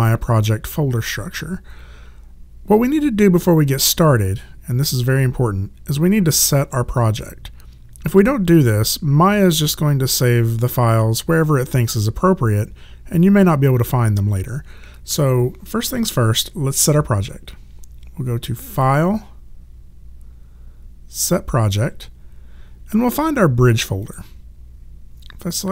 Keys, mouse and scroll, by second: 18.7 click, 21.2 click, 24.0 click.